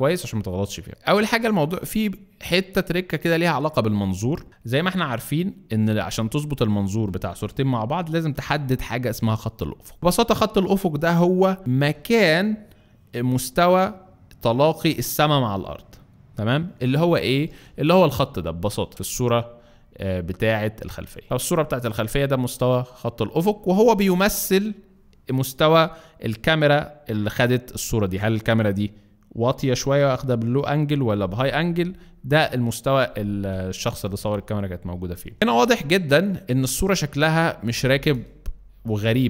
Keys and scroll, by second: 0.9 alt+space.